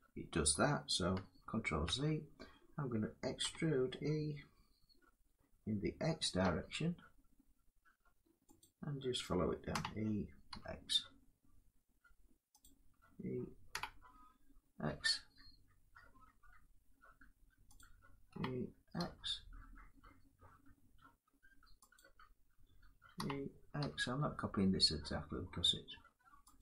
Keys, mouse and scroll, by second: 1.3 ctrl+z, 3.1 e, 6.1 x, 9.4-10.2 typing, 12.3 click, 13.4 e, 14.6 x, 18.0 e, 18.7 x, 21.6 click, 22.9 e, 26.3 click.